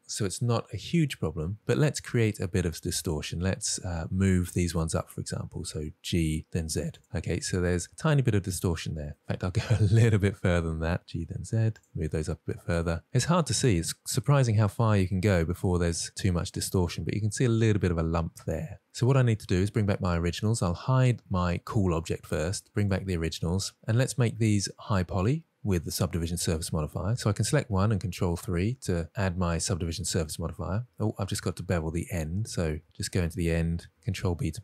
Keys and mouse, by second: 2.5 Tab, 3.6-4.0 middle drag, 4.9 click, 6.2 g, 6.9 z, 7.3 click, 7.5 Tab, 8.3-9.8 middle drag, 10.5 shift+middle click, 11.0 Tab, 11.7 g, 11.9 z, 12.3 click, 12.6 Tab, 13.1-17.0 middle drag, 17.7 middle click, 18.5 middle drag, 22.4 click, 23.2 click, 26.7 click, 29.1 ctrl+3, 31.9 Tab, 32.9 2, 33.2 alt+click, 34.5 ctrl+b.